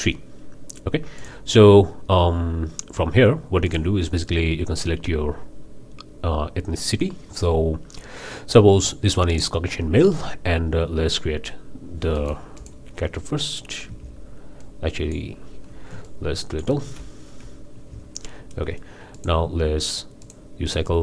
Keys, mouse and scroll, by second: 1.2 click, 3.7 click, 9.3 click, 12.1-12.5 drag, 12.6 drag, 13.0 scroll down 2, 13.9 Delete, 14.6-15.3 right drag, 16.0-16.8 ctrl+right drag, 17.7 Delete, 19.1 drag, 20.2 drag.